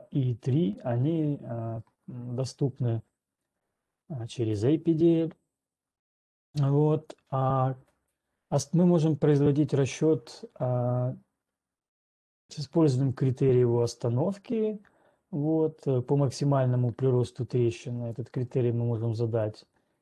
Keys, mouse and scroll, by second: 4.9 ctrl+right click, 10.4 right click, 18.4 right click, 19.4 click.